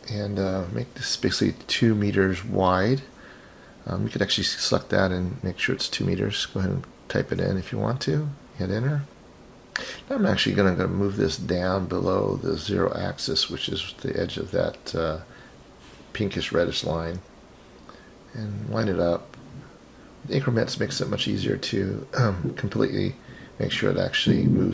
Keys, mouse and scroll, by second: 4.2 click, 5.5-8.3 drag, 9.5 click, 12.6-16.4 drag, 17.8 click, 21.4-24.1 drag.